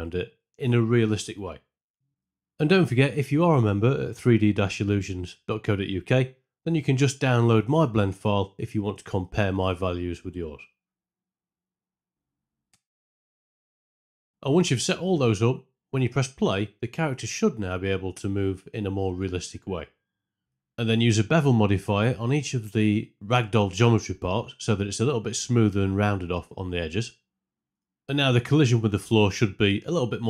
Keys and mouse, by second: 0.0 click, 0.2 click, 1.9 click, 2.3 click, 2.6 click, 3.3 Tab, 3.5 click, 3.8 alt+click, 3.9 alt+click, 4.0 z, 4.6 click, 4.9 click, 5.3 click, 5.7 click, 6.2 ctrl+click, 7.2 click, 7.3 click, 8.0 click, 9.1 r, 9.1 x, 9.1 KP_1, 9.1 KP_8, 9.2 ctrl+KP_Enter, 9.7 click, 9.9 click, 10.2 alt+KP_Enter, 10.4 click, 10.6 typing, 11.0 shift+click, 11.4 alt+click, 12.3 KP_Subtract, 12.3 alt+click, 12.4 KP_Add, 12.9 click, 13.1 KP_Enter, 13.1-14.3 typing, 13.9 shift+Left, 16.7 space, 18.7 space, 21.1 right click, 22.3 click, 23.3 ctrl+l, 25.6 alt+click, 26.0 alt+click, 26.8 alt+click, 27.0 click, 28.1 shift+Left.